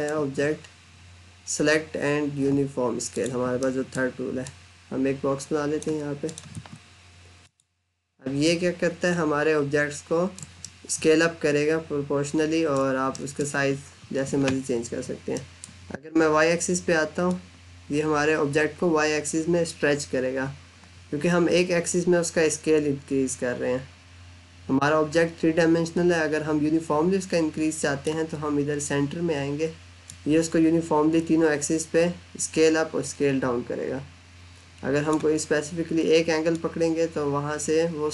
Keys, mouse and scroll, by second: 2.9 click, 3.4 middle click, 4.3 click, 6.4 Escape, 7.3 click, 8.5 middle click, 10.5 middle click, 13.0 middle click, 17.1 click.